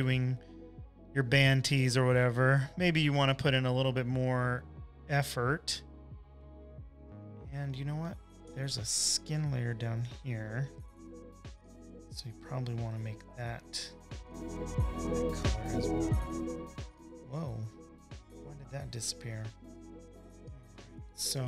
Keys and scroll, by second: 5.5 space, 6.0 space, 6.1 space, 9.4 super+-, 9.6 super+-, 10.0 space, 10.5 space, 10.6 space, 12.1 super+j, 13.0 alt+shift+BackSpace, 20.0 space, 20.4 space, 20.5 space.